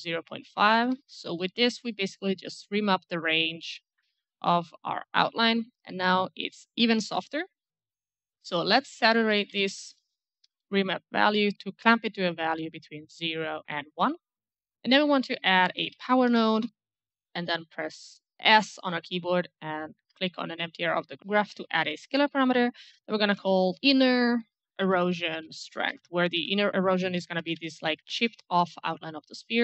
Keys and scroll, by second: 0.5 ctrl+a, 0.7 KP_Decimal, 0.9 KP_5, 1.0 Return, 8.3-10.3 typing, 10.6 Return, 15.4-16.6 typing, 17.8 s, 17.9 s, 18.0 s, 20.0 s, 23.0-28.0 typing.